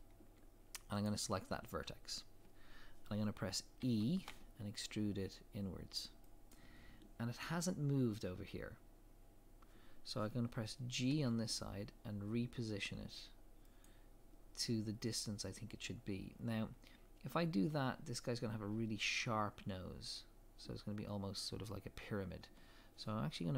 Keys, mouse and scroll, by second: 1.0 click, 3.8 e, 11.1 g, 16.5-23.5 scroll up 1.